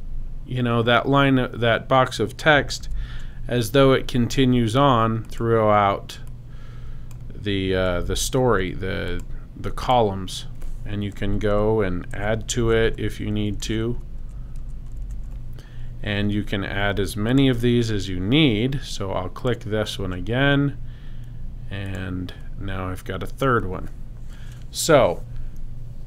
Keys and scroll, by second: 2.8 super+z, 7.9 super+c, 11.1 Down, 12.1 Return, 12.5 super+v, 13.1 super+Return, 13.6 super+v, 14.6 Return, 15.0 super+v.